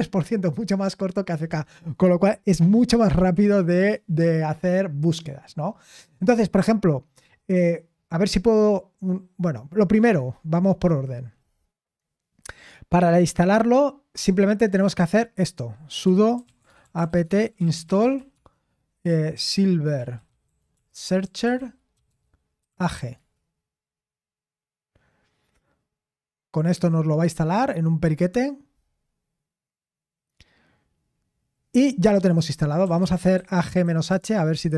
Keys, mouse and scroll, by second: 16.5-23.3 typing, 32.9-34.3 typing.